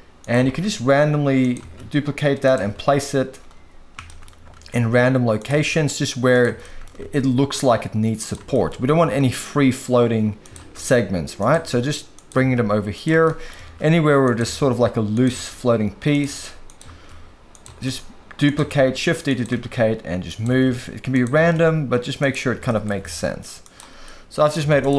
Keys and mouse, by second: 0.5 shift+d, 1.6 shift+d, 2.7 shift+d, 4.1 shift+middle drag, 4.5 shift+d, 5.7 shift+d, 6.3 click, 6.6 shift+middle click, 7.2 shift+d, 8.5 shift+middle click, 9.0 shift+d, 10.7 shift+d, 11.4 click, 11.7 shift+d, 12.1 click, 12.5 shift+d, 13.2-13.5 shift+middle drag, 13.8-21.5 typing, 16.6 click, 17.5 click, 19.2 click, 21.1 click, 22.6 shift+middle drag, 23.1 shift+d, 24.0-24.5 middle drag, 24.6 z.